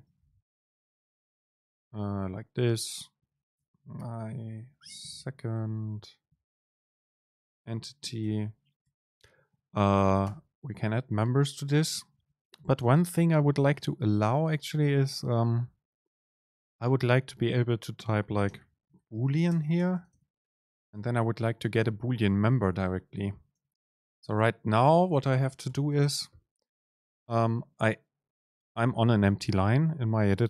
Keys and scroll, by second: 0.1 BackSpace, 8.9 Down, 9.7 Down, 9.7 super+space, 14.3 shift+Down, 19.6 BackSpace, 19.6 super+space, 23.6 super+space, 24.6 BackSpace, 26.4 Escape, 27.2 Return.